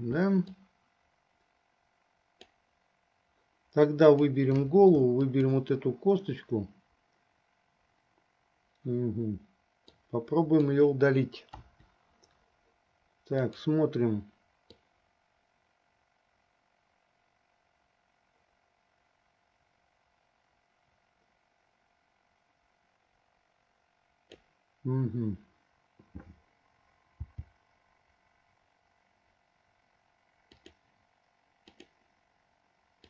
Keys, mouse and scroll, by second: 1.0-2.8 drag, 4.1 click, 5.6 ctrl+click, 10.0 click, 10.2 click, 11.7 Delete, 13.6 click, 15.1-24.7 drag, 27.3 g, 32.0 click.